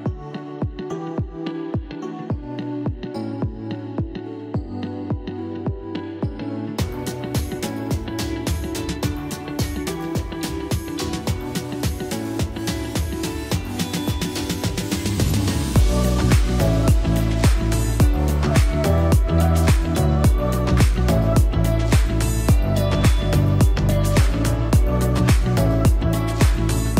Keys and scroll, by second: 9.3 ctrl+t, 12.0 z, 14.9 z, 21.2 ctrl+t.